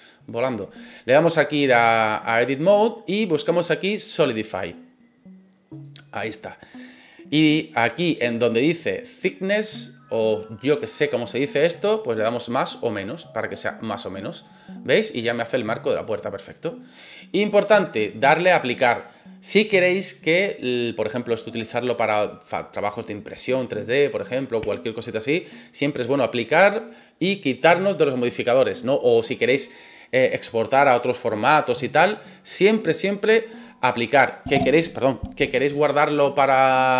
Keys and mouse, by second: 2.4-5.8 drag, 11.8-14.3 drag, 14.5-16.9 middle drag.